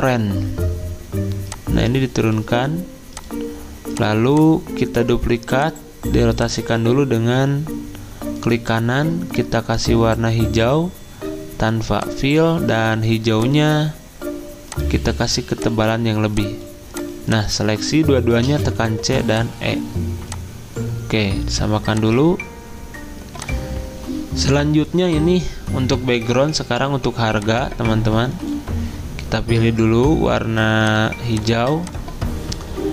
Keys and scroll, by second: 18.5-18.9 typing.